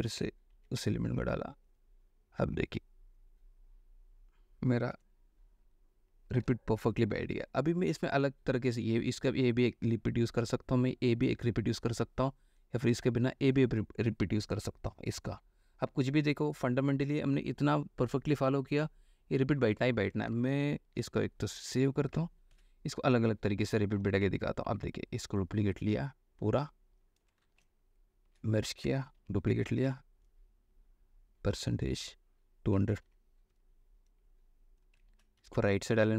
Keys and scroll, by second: 0.2 ctrl+v, 0.7 ctrl+t, 5.2 Return, 7.3 ctrl+e, 20.5 space, 22.7 ctrl+s, 24.8 ctrl+y, 27.5 alt+space, 28.5 ctrl+alt+u, 29.3 ctrl+alt+j, 29.8 ctrl+alt+c, 33.3 2, 35.3 ctrl+a, 35.6 ctrl+v.